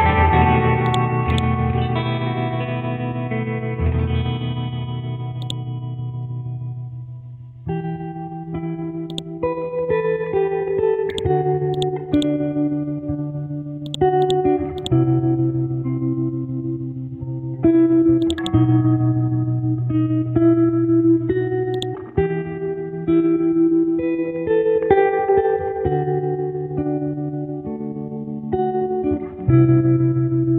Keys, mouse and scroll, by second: 11.1 right click, 11.7-13.5 drag, 13.8 right click, 14.2 click, 15.3-18.2 scroll up 1, 18.2 click, 23.8 KP_5, 24.1 KP_0, 25.1 shift+Left, 25.7 KP_6, 26.2 Tab, 28.0 scroll down 1, 28.6 scroll up 1.